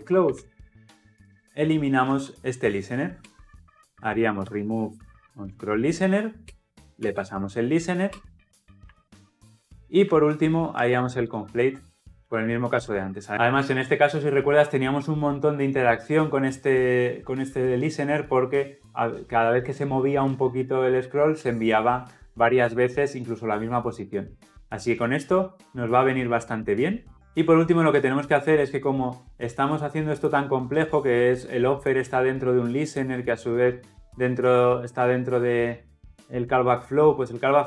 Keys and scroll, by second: 3.2 Return, 3.4 Return.